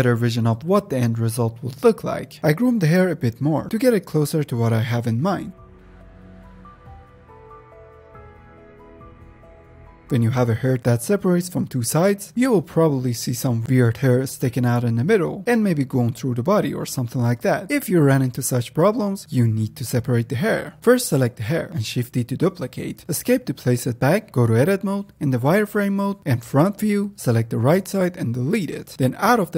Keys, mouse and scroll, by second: 0.6-1.0 scroll up 1, 1.0 shift+middle click, 1.1-1.4 scroll down 1, 1.4 click, 2.0-2.3 scroll down 2, 2.3 click, 2.8 middle click, 2.9-3.8 drag, 3.8 f, 4.0-9.8 drag, 9.8 ctrl+Tab, 9.9 click, 10.0-10.5 scroll down 1, 10.5-11.2 middle drag, 11.2-11.8 scroll up 2, 11.8 click, 12.1 ctrl+Tab, 12.9-17.7 drag, 18.6 ctrl+Tab, 19.1-19.8 middle drag, 19.8-20.7 scroll up 5, 20.7-22.2 shift+middle drag, 22.2 shift+d, 24.9 Tab, 25.1-25.6 scroll down 2, 25.6 shift+middle click, 25.7 z, 26.5 click, 27.2 ctrl+click, 28.3 x, 29.0 ctrl+Tab.